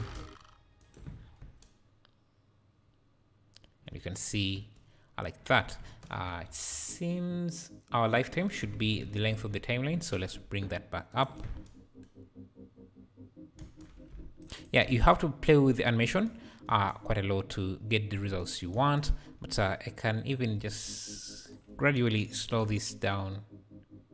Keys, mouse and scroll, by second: 0.8 shift+right click, 1.2 scroll down 5, 1.4 space, 4.0 space, 4.6 space, 5.8 space, 6.2-6.9 scroll up 14, 8.0-11.1 drag, 11.1 shift+right click, 11.4 space, 13.8 space, 14.5-15.0 shift+right drag, 15.0 space, 16.2 space, 16.7 space, 17.8-18.9 scroll up 3, 18.9 space, 20.2 click, 20.7 g, 22.2-22.6 shift+right drag, 22.6 space.